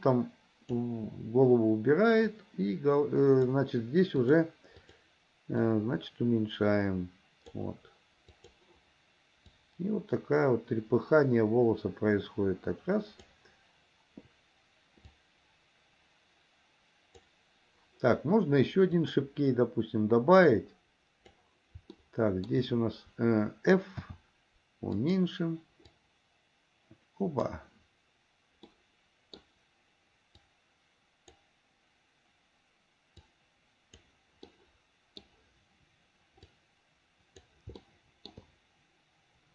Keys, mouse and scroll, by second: 2.4-5.1 drag, 5.8-7.8 drag, 8.6 click, 9.8-13.5 drag, 15.3-17.5 drag, 19.0 click, 20.7 click, 22.1 shift+middle click, 24.0 f, 26.0-27.8 drag, 28.7 middle click, 30.5-31.6 drag, 33.3 click, 34.6 middle click, 36.6-37.7 drag, 38.0 shift+middle click.